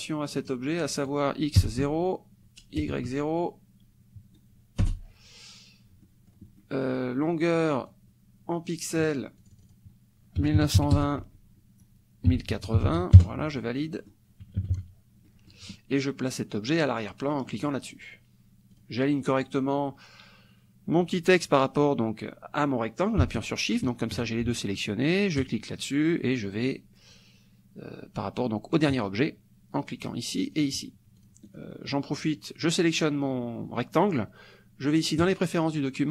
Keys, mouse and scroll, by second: 0.4 click, 0.9 click, 1.6 KP_0, 1.8 Tab, 2.8 KP_0, 4.9 Return, 6.1 middle click, 6.6 middle click, 7.9-10.4 drag, 10.4 KP_1, 10.6 KP_9, 10.8 KP_2, 11.0 KP_0, 11.3 Tab, 12.3 KP_1, 12.8 KP_8, 13.1 KP_0, 13.2 KP_Enter, 13.9 click, 14.6 KP_Subtract, 15.3 click, 17.5 click, 18.7 click, 23.4 shift+click, 25.4 click, 29.8 click, 30.5 click, 31.2 click, 31.5 click, 35.2 click.